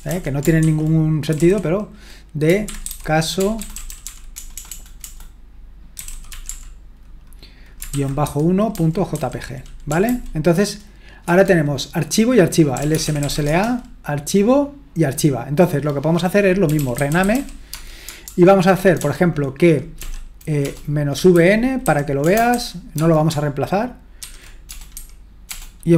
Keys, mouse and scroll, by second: 0.0-11.3 typing, 12.5-13.7 typing, 16.4-23.0 typing, 24.2-25.9 typing.